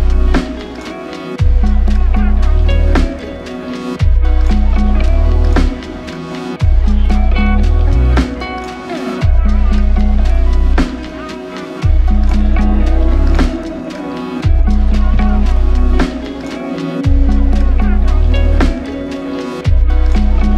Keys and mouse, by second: 8.9 double click, 11.8 double click.